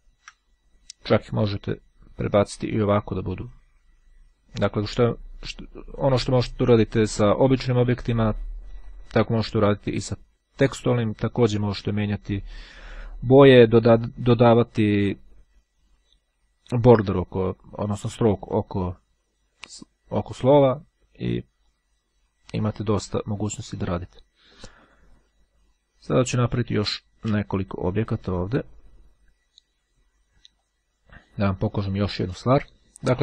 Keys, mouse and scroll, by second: 1.5-3.2 drag, 5.4-6.8 drag, 8.8-10.8 drag, 11.9-13.0 drag, 26.6 click, 30.8 click, 31.9 click.